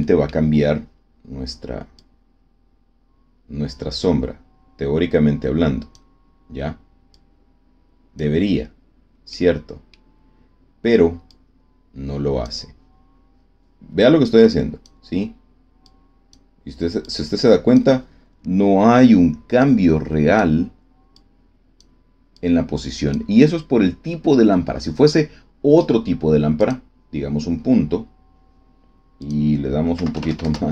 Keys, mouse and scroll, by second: 1.9-6.1 drag, 7.0-8.3 drag, 9.2 middle click, 10.2 scroll down 1, 11.2-12.6 drag, 14.2 click, 15.8 click, 17.0 click, 19.6 click, 21.1 click, 22.3-23.2 drag, 26.5 click, 29.2 click, 29.9 KP_1, 30.1 KP_0, 30.4 KP_Enter.